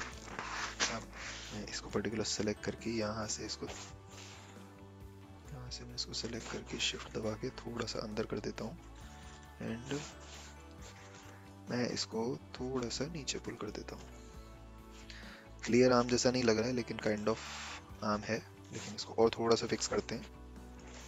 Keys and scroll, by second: 1.1 a, 4.1 ctrl+z, 19.8 a.